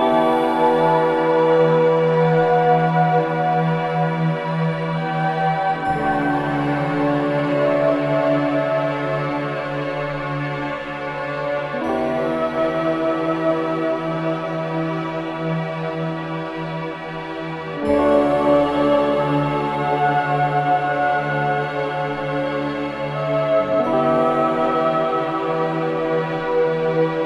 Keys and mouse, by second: 2.1-4.1 drag, 4.4 ctrl+z, 4.9-6.3 alt+drag, 6.9-8.3 drag, 8.3 ctrl+z, 9.0-12.7 drag, 12.8 alt+shift+click, 17.3 alt+click, 17.9 3, 19.0-20.1 alt+shift+drag, 19.7 ctrl+z, 20.3-23.2 drag, 23.2-27.2 drag.